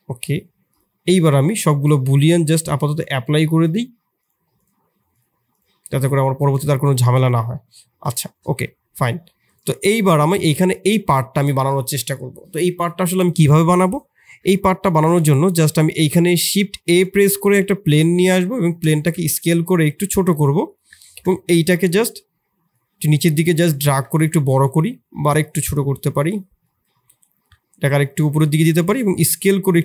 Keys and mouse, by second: 0.6 click, 1.7 click, 2.7 click, 4.2-5.7 drag, 5.7 middle click, 6.6 shift+click, 7.5 middle drag, 8.1 shift+drag, 8.5 middle drag, 9.7 shift+a, 16.8 shift+a, 18.2 r, 19.8 s, 21.0 shift+drag, 21.3 Tab, 21.9 click, 22.7-24.1 drag, 28.6 s.